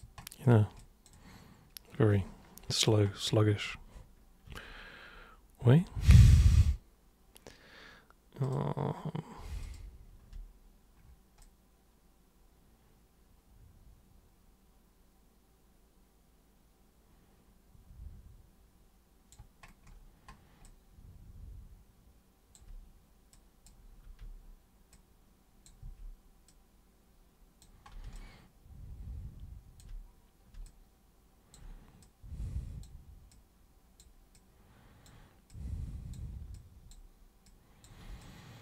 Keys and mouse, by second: 0.8 alt+super+click, 1.3-2.8 alt+super+drag, 4.4 super+3, 5.6 super+1, 8.4 super+click, 9.6 super+click, 11.4-19.3 alt+super+drag, 20.6-22.5 alt+super+drag, 23.3 super+click, 24.0 super+e, 24.9-25.7 super+drag, 25.8 super+w, 26.5 super+click, 28.2-29.8 alt+super+drag, 30.7 alt+super+click, 32.0-32.8 super+drag, 33.3 super+click, 34.4-35.1 super+drag, 35.5 super+click, 36.5 super+click, 37.5 super+click, 38.2 alt+super+click.